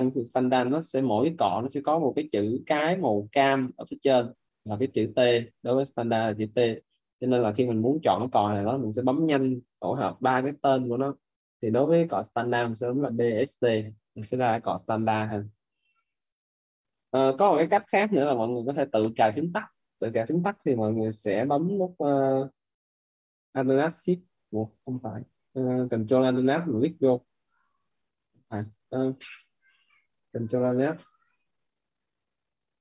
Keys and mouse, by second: 7.3 click, 12.9-14.0 typing, 23.7 click.